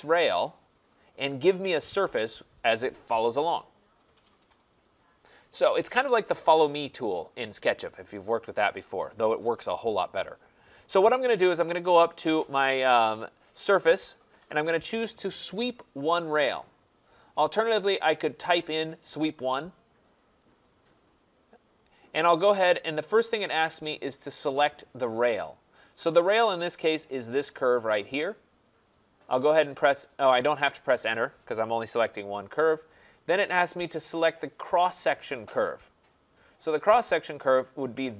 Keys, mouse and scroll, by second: 5.4-10.5 drag, 13.8-25.7 drag, 27.1-32.2 drag.